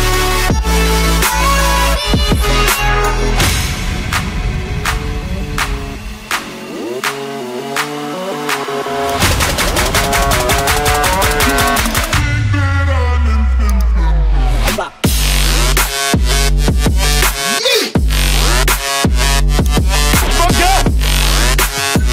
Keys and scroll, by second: 2.9 typing, 11.3 typing, 15.4 typing.